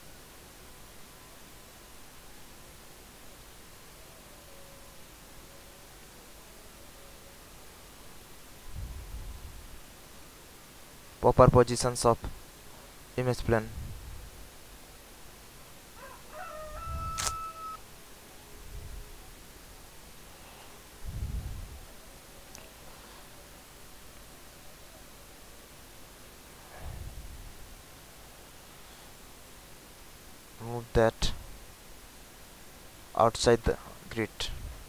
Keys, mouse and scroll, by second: 0.1-7.2 drag, 7.4 scroll up 1, 8.6 alt+middle click, 9.4 scroll up 1, 10.1-11.2 middle drag, 11.9 click, 12.6 middle click, 13.6 click, 15.1-17.4 middle drag, 18.9 click, 21.8 alt+click, 23.9-27.1 drag, 27.5 alt+right click, 28.1 alt+click, 29.3-31.5 drag, 31.7 alt+click, 32.7 click, 34.1 alt+right click, 34.6 alt+click.